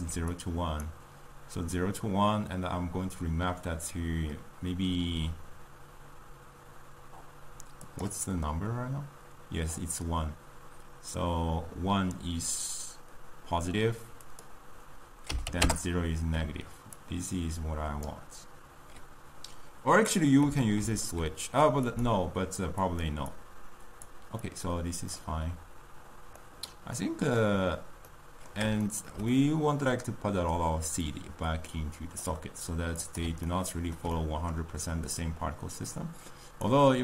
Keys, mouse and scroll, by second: 18.1-32.4 drag, 33.0 click, 36.8-37.0 drag.